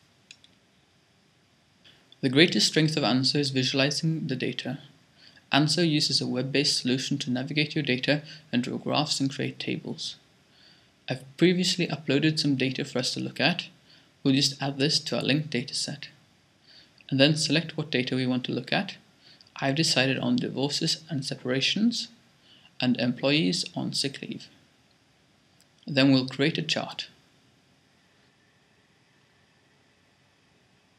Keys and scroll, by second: 13.0-13.8 typing, 30.5-30.9 typing.